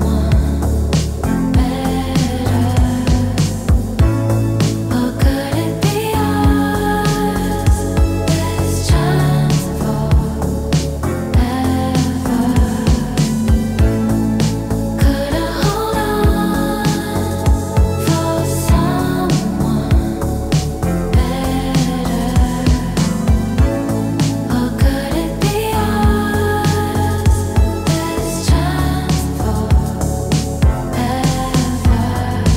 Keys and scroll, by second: 0.0-0.1 typing, 1.6 f, 6.0 e, 6.5 w, 8.3 e, 9.5 w, 9.9 e, 10.5 w, 13.0 e, 14.1 w, 17.5 ctrl+z, 28.5 f, 28.9 f, 30.6 e.